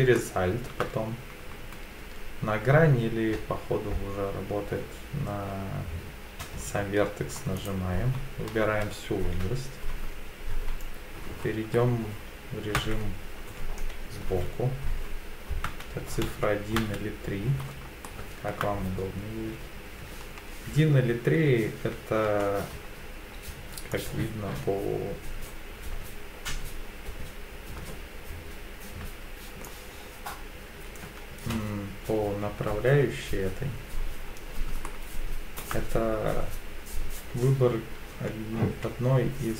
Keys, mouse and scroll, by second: 0.1 shift+middle click, 7.6 alt+click, 11.8-12.8 scroll down 2, 12.8-13.6 scroll down 1, 12.8 KP_1, 13.6 KP_3, 14.2 KP_1, 15.6 KP_1, 16.2 KP_3, 16.8 KP_1, 18.0 shift+middle click, 19.7-22.2 typing, 23.9 click, 24.2-29.6 drag, 31.3 KP_1, 32.2 KP_3, 34.8 shift+middle click, 37.1 KP_1, 38.6 KP_3.